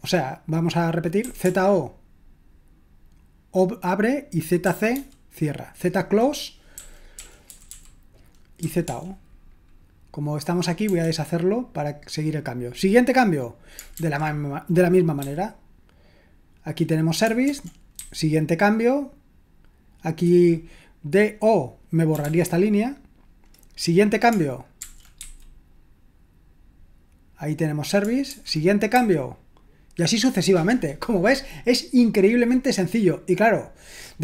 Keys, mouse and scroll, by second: 1.0-1.9 typing, 4.6-4.9 typing, 6.5-9.3 typing, 10.9 typing, 13.9 typing, 15.2 typing, 17.4-17.9 typing, 21.9-22.7 typing, 24.8-25.2 typing, 28.3-29.4 typing.